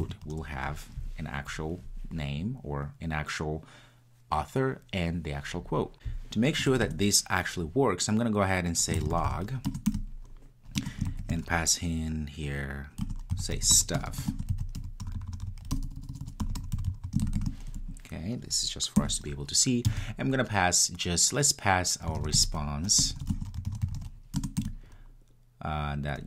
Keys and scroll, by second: 9.7 Return, 24.4 Return.